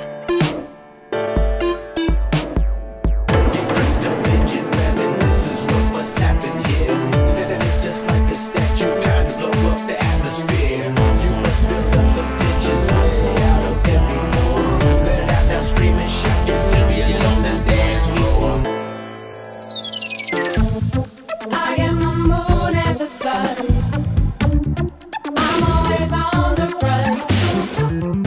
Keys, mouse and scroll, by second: 2.4 click, 4.5 click, 5.7-7.1 drag, 7.1 scroll up 4, 7.9 click, 8.8 scroll, 9.5-10.3 scroll, 10.4-11.7 scroll up 7, 11.7-12.4 drag, 13.6 click, 15.8 click, 17.1-23.6 drag, 23.6-26.0 drag, 26.0-26.9 scroll down 2, 26.9-28.2 drag.